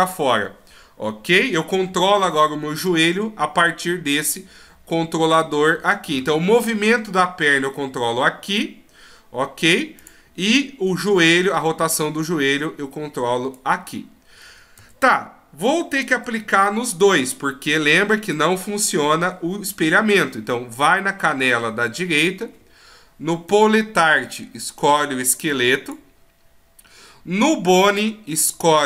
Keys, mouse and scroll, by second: 3.9 click, 6.6 right click, 7.1 g, 10.5 right click, 11.3 click, 14.5 a, 16.1 alt+r, 16.1 a, 16.4 alt+g, 17.8 right click, 18.2 right click, 18.6 middle click, 19.7-20.3 scroll up 2, 20.3-21.1 scroll down 1, 21.1 middle click, 23.5 click, 27.8 click.